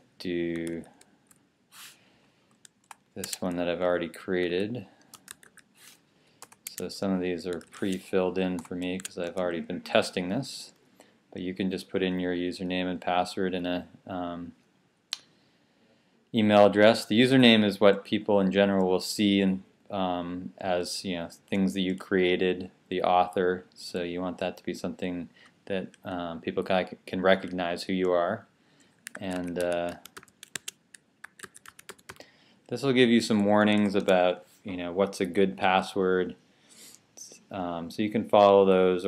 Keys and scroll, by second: 0.0-1.0 typing, 1.6 Down, 4.3-5.7 typing, 6.0 Down, 7.3-8.7 typing.